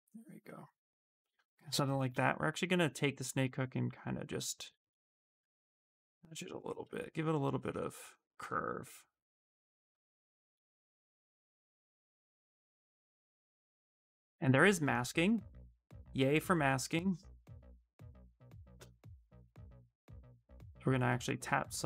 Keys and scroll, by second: 1.8 s, 4.6 s, 9.6 s, 21.2 w.